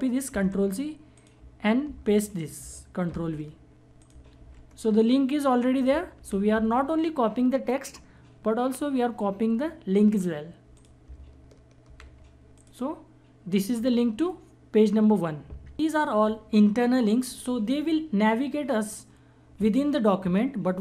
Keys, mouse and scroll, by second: 0.3 ctrl+c, 1.1 click, 1.8 ctrl+c, 3.1 ctrl+v, 4.0 click, 4.3 ctrl+v, 5.7 click, 6.2 ctrl+v, 10.7 click, 11.8 ctrl+v, 12.5 click, 15.7 click.